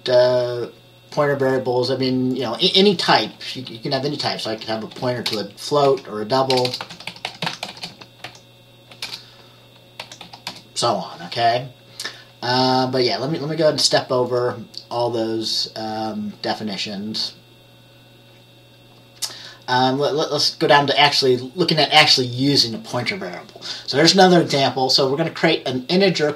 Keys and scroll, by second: 4.6-10.6 typing.